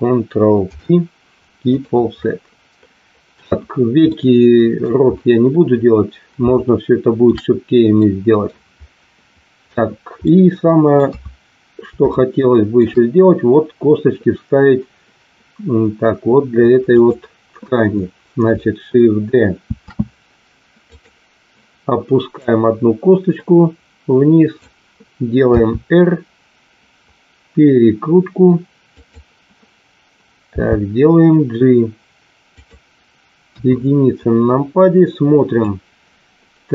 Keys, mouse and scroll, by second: 0.6 ctrl+p, 4.1 middle click, 6.3 shift+middle click, 8.0 middle click, 10.2 middle click, 11.1 KP_3, 12.1 shift+middle click, 16.9 click, 19.6 shift+d, 22.6-24.5 drag, 25.6 r, 28.9 click, 30.7 g, 33.5 KP_1, 35.6-36.7 drag.